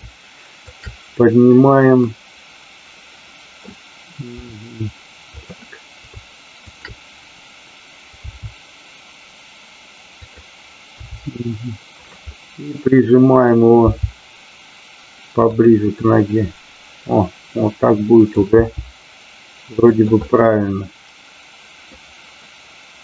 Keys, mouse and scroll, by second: 0.7 shift+click, 1.9-3.6 middle drag, 5.2 click, 6.8 shift+click, 10.3 click, 11.9 click, 12.4-13.7 middle drag, 15.5 click, 16.0-18.2 middle drag, 19.9 click, 20.3 scroll up 1, 20.4-22.0 middle drag.